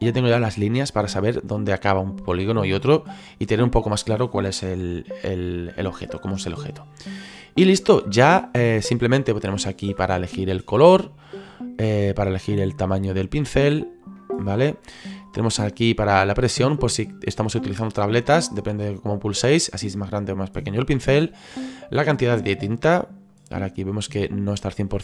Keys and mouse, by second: 5.1 middle click, 7.7 middle click, 13.6 click, 22.8 click.